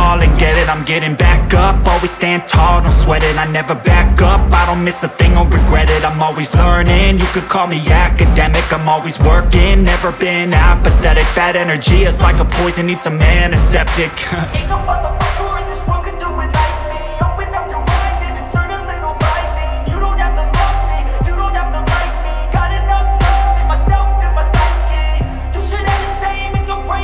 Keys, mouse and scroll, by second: 3.4 click, 4.8 space, 4.9 click, 5.3 space, 6.5-8.8 typing, 7.4 click, 8.5 click, 10.5-14.6 typing, 11.6 click, 12.3 click, 13.3 click, 14.0 click, 14.8 click, 15.9-26.3 typing, 16.2 click, 17.9 click, 18.4 click, 19.1 click, 19.6 click, 22.1 click, 23.0 click, 24.7 click, 25.5 click, 26.5 click.